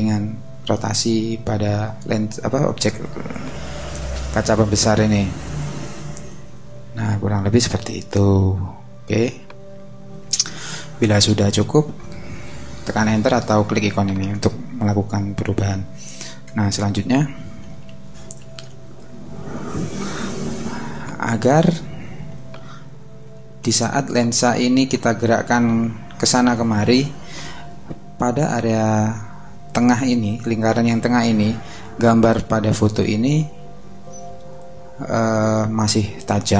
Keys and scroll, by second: 17.9 super+-, 22.6 super+=, 23.6 super+space.